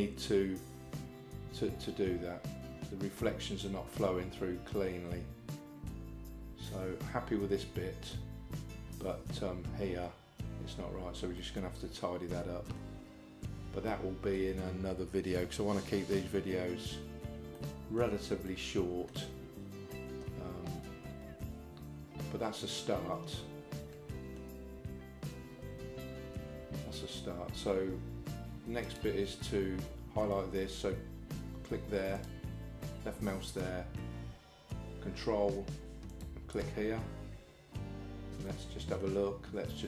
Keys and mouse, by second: 11.5-12.8 middle drag, 13.9 shift+middle click, 17.6 middle click, 18.5 shift+middle click, 19.9-24.4 middle drag, 32.2 click, 36.1 ctrl+click, 38.5 middle click.